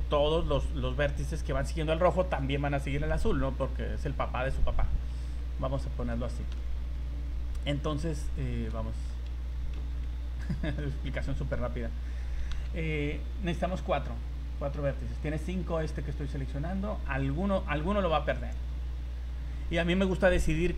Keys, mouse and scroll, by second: 5.5 scroll down 3, 5.8 scroll up 3, 6.3 shift+middle click, 8.1 right click, 8.6 right click, 8.8 shift+middle click, 9.7 KP_1, 10.4 shift+middle click, 11.0 scroll up 2, 12.5 v, 17.7 z, 18.3 z.